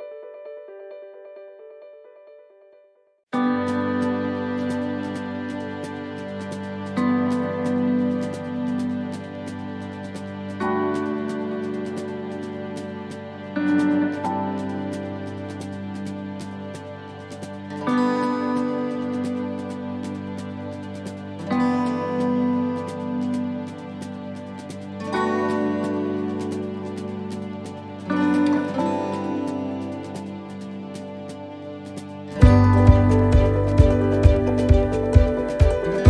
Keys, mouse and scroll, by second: 1.0 click, 3.0 middle click, 3.5 scroll down 1, 4.0 shift+middle click, 4.4 middle click, 5.2 right click, 6.1 right click, 6.5 alt+shift+right click, 7.7 middle click, 8.7 click, 10.8 middle click, 13.6 click, 15.0 middle click, 17.3 click, 18.2 middle click, 20.9 s, 24.0 middle click, 25.1 middle click, 27.4 ctrl+z, 27.7 middle click, 28.6 middle click, 29.8 click, 30.8 middle click, 33.6 right click, 34.2 alt+shift+right click, 35.2 middle click.